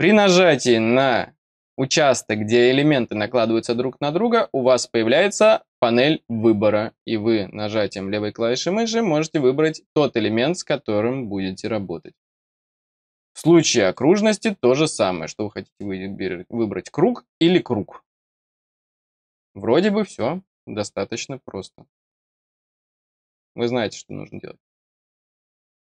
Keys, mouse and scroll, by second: 13.8 click.